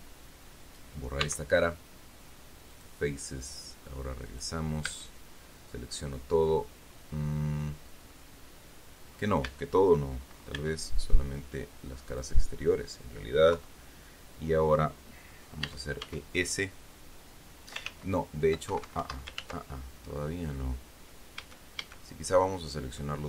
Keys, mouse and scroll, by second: 0.0 right click, 1.6 x, 3.1 click, 4.6 click, 5.2 a, 8.5-9.7 middle drag, 9.8 a, 10.9 b, 11.7-12.7 drag, 13.9 KP_3, 16.0 e, 16.4 s, 18.2 ctrl+z, 19.0 ctrl+Escape, 19.7 ctrl+z, 20.4 scroll up 2, 20.9 scroll down 2, 21.7 a, 22.8-23.1 scroll down 2.